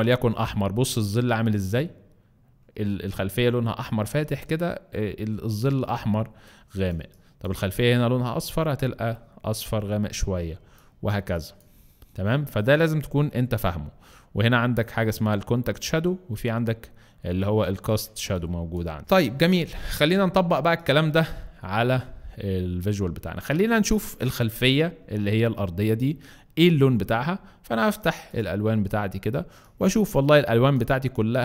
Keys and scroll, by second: 27.3 alt+space.